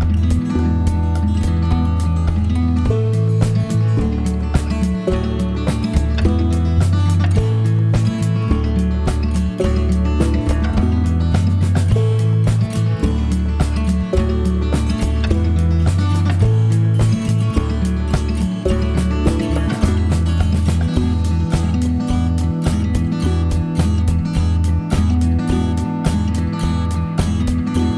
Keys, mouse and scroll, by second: 0.2 click, 1.2 right click, 4.4 click, 7.7 shift+click, 9.7 click, 13.6 click, 15.4 click, 18.2 click, 22.0 click, 25.7 click.